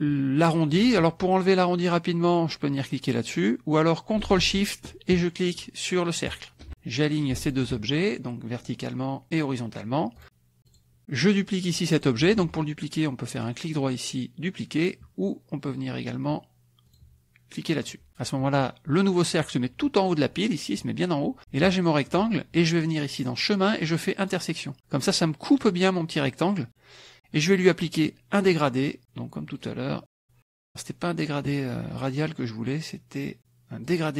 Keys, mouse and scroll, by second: 6.3 ctrl+shift+click, 7.4 shift+click, 8.6 click, 9.3 click, 10.2 click, 10.6 click, 11.4 click, 12.3 ctrl+z, 13.3 right click, 16.9 click, 17.8 click, 21.7 shift+click, 23.2 click, 24.2 click, 29.5 click, 33.8 click.